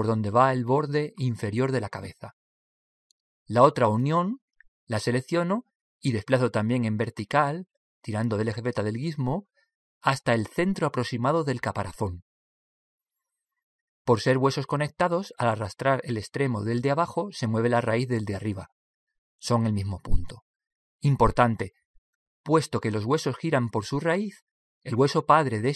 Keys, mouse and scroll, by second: 6.2 right click, 7.6 click.